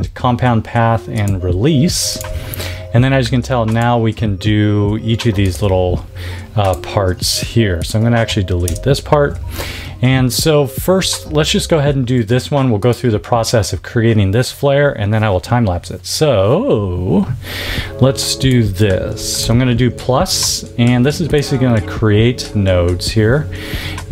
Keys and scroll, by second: 8.6 BackSpace, 11.8 a, 19.3 =.